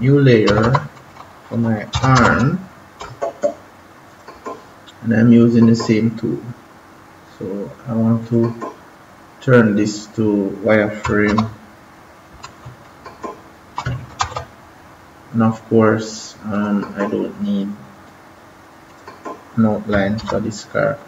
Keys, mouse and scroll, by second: 0.4 BackSpace, 1.9 a, 2.9 right click, 4.0 click, 8.2 click, 11.6 ctrl+=, 12.8 space, 14.2 ctrl+z, 16.5 click, 20.2 -.